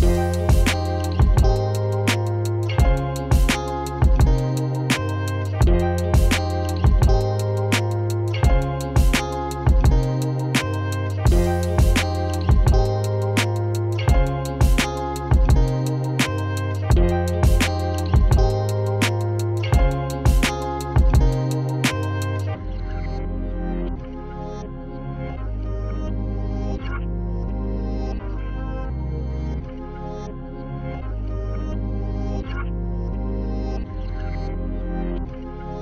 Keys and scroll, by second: 11.7 BackSpace, 12.4 BackSpace, 13.7 typing.